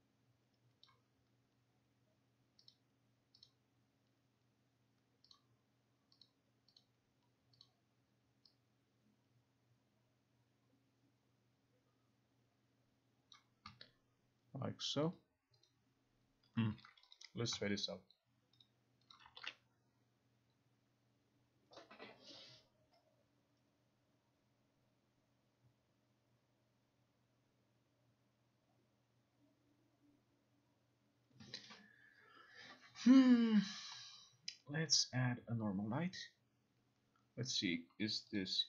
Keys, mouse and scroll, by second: 0.9 click, 2.8 click, 3.5 click, 5.4 click, 6.3 click, 6.9 click, 7.7 click, 13.4 click, 15.2 click, 15.7 click, 17.2 click, 18.7 click, 19.2 click, 19.5 ctrl+r, 35.1 click, 38.5 click.